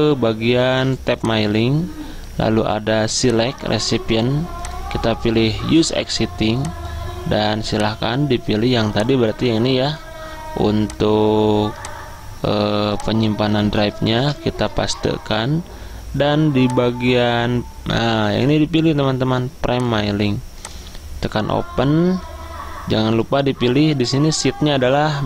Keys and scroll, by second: 14.3 ctrl+v, 14.7 Return.